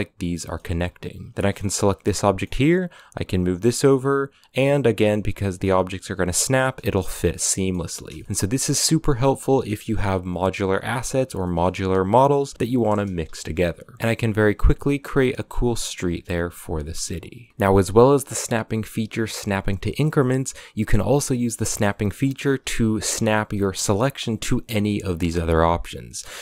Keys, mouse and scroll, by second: 0.2-0.5 middle drag, 0.5 a, 0.7 scroll down 3, 1.2 right click, 1.5 KP_7, 2.0-2.4 shift+middle drag, 2.4 g, 3.2 scroll up 5, 3.5 g, 6.5-7.1 scroll down 7, 7.1-7.5 middle drag, 7.5 scroll up 1, 7.9 shift+middle drag, 8.2 a, 8.2 middle click, 8.8 right click, 9.0-9.7 middle drag, 9.7 KP_7, 10.4 shift+d, 11.2-11.8 shift+middle drag, 11.8 r, 13.4 scroll up 3, 13.8 g, 13.9 shift+d, 14.0 scroll down 4, 14.5-14.9 middle drag, 14.9 a, 14.9 scroll up 2, 15.0-26.4 middle drag.